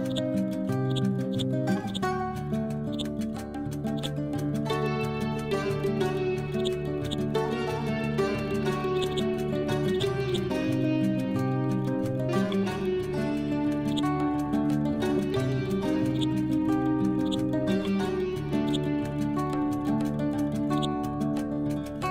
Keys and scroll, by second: 2.5 ctrl+z, 15.2 ctrl+g, 19.8 Up, 20.2 Left.